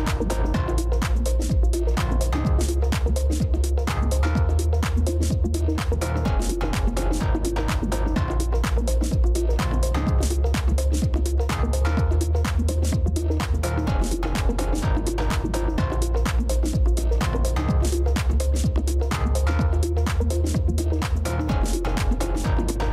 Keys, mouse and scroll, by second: 4.2 shift+click, 10.3 alt+click, 15.0 shift+click.